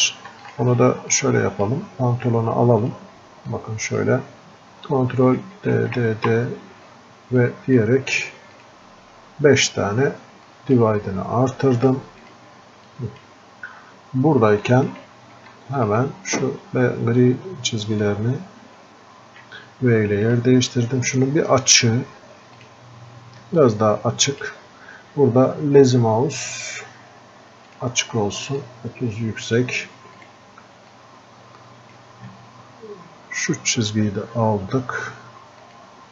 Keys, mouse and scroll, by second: 19.8 v, 20.4 click, 22.7-30.3 drag, 30.3 right click, 32.2-36.1 drag.